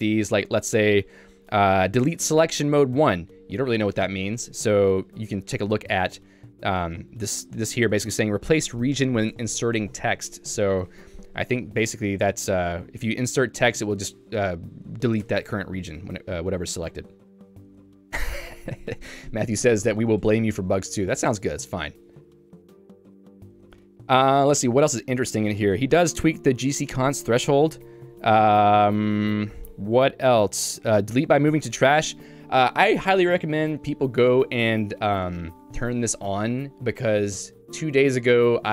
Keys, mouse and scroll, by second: 0.0-2.4 typing, 4.7 Escape, 4.9-8.3 typing, 15.2 Escape, 16.1-17.1 h, 17.4 k, 21.7 Escape, 21.9 k, 23.3 j, 23.7 k, 25.1 j, 28.1 Escape, 28.7-29.7 h, 30.8 k.